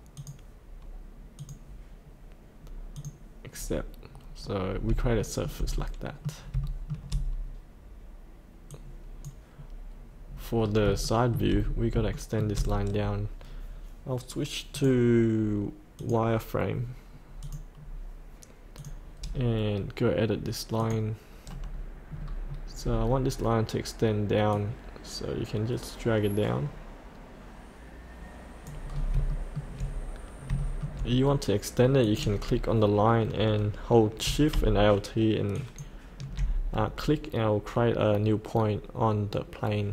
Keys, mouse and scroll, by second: 0.4 click, 3.6 scroll up 1, 5.2 shift+middle click, 5.8 middle click, 6.6 shift+middle click, 8.7 click, 10.6 scroll up 1, 11.0 shift+middle click, 11.6-11.9 scroll up 1, 12.1 shift+middle click, 14.7 click, 17.8-18.7 scroll up 1, 18.7 click, 22.1 scroll down 1, 22.7-24.5 scroll down 1, 24.5-28.8 drag, 28.9-29.2 scroll up 1, 30.5 shift+middle click, 31.1-32.1 scroll down 1, 32.1 click, 35.5 alt+shift+click.